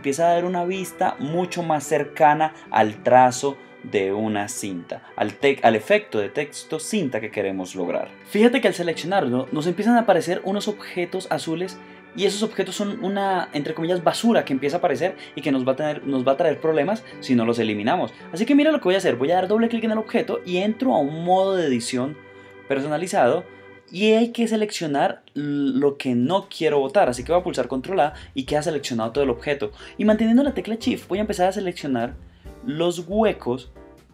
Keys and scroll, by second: 25.4 super+a, 26.3 shift+super+a.